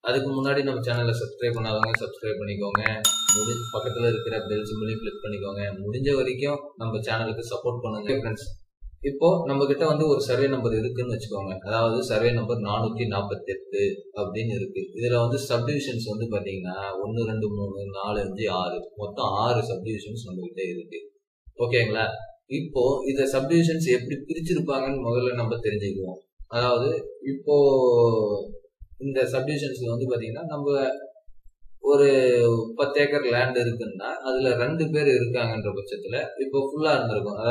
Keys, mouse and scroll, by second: 0.8 double click, 2.0-5.2 scroll up 1, 16.3-18.0 scroll down 1.